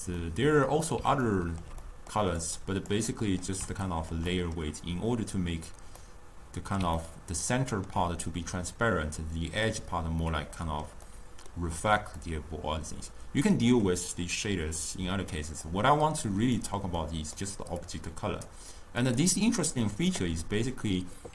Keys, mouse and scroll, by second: 2.5-6.1 drag, 6.1 scroll down 1, 6.2-12.6 middle drag, 12.6-16.8 drag, 17.9-19.3 drag.